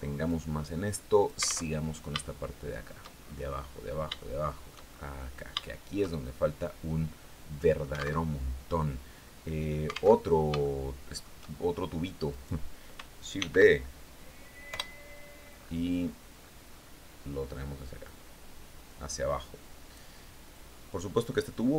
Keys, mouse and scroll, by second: 1.2 alt+Tab, 1.7 shift+click, 2.6-3.4 shift+scroll down 5, 3.6 shift+click, 4.7-5.3 scroll up 3, 5.0 shift+middle click, 5.5 shift+click, 6.0-7.4 middle drag, 7.4 alt+click, 7.7 alt+Tab, 9.7 alt+Tab, 10.1 shift+click, 11.7 right click, 12.8 shift+d, 14.2 Return, 14.8 scroll down 2, 15.0 scroll up 2, 15.4 scroll down 2, 15.8 scroll up 2, 17.5-19.6 drag, 20.0-21.7 drag.